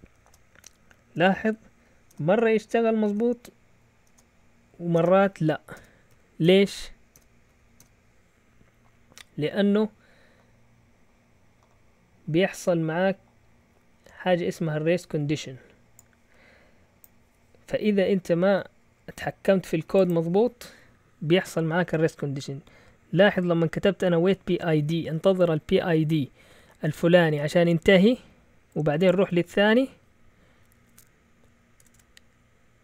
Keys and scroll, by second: 0.0-7.7 typing, 23.8-25.8 typing, 31.7 Escape, 31.9 Escape.